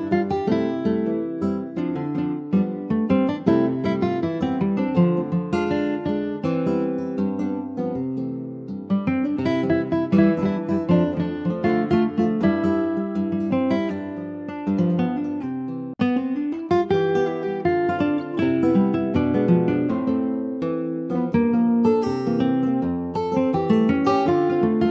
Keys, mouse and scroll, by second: 0.3 click, 1.2-2.4 scroll down 6, 1.5 ctrl+z, 1.7 click, 2.4 ctrl+s, 2.5 click, 3.9 ctrl+click, 4.2 scroll up 2, 5.1 shift+middle click, 5.6-5.9 scroll down 2, 5.9 click, 6.7-7.9 shift+middle drag, 7.9 shift+click, 8.5 shift+middle click, 9.1-9.5 scroll up 2, 9.5-12.2 shift+middle drag, 12.2 click, 22.2-22.6 scroll down 2, 22.6 alt+z, 22.9 click, 23.1 scroll down 3, 23.3 middle click, 23.9 ctrl+s, 24.1 click, 24.4 scroll up 2, 24.7 middle click.